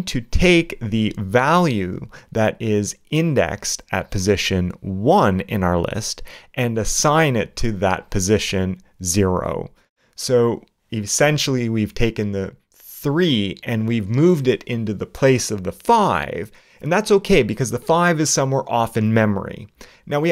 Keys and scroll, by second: 4.4 alt+8, 4.8 alt+|, 10.3 alt+q, 10.9 alt+8, 11.8 alt+0, 12.2 alt+0, 12.9 alt+9, 13.6 alt+space, 14.2 shift+BackSpace, 14.6 shift+0, 14.6 shift+space, 18.6 shift+a, 18.9 shift+Return.